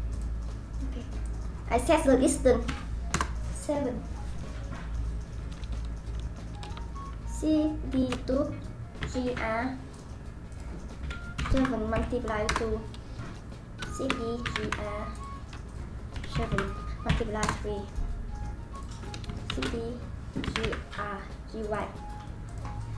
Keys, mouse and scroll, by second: 1.2-4.8 drag, 7.9 shift+d, 10.5-13.9 drag, 13.9 shift+d, 15.7-18.8 drag, 19.5 shift+d, 22.4-22.9 drag.